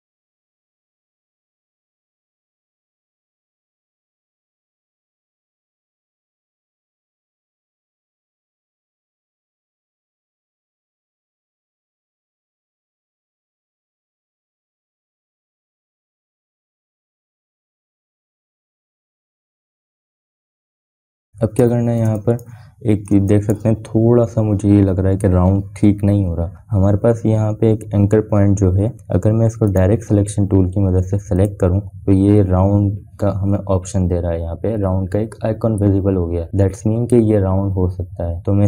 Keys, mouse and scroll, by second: 4.8 space, 5.0 click, 5.3 space, 6.4 click, 6.5-12.2 drag, 12.4 space, 12.9 click, 13.0 space, 14.4-18.8 drag, 18.8 space, 19.1 click, 19.3 space, 20.0 scroll down 1, 20.3 space, 20.5 click, 22.1 scroll up 1, 22.6 space, 22.9 click, 23.2 space, 23.9 click, 24.8 space, 25.0 click, 28.5 scroll up 1, 31.4 click.